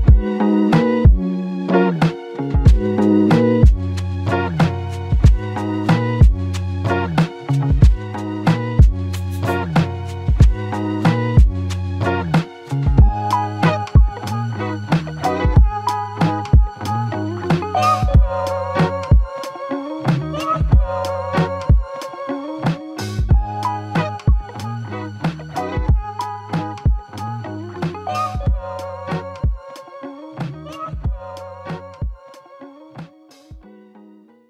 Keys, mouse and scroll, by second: 1.6 ctrl+click, 6.3 q, 11.3 double click, 13.1 double click, 13.1 shift+click, 15.4 shift+click, 22.8 double click, 24.3 shift+click, 29.5 alt+click, 32.1 alt+click.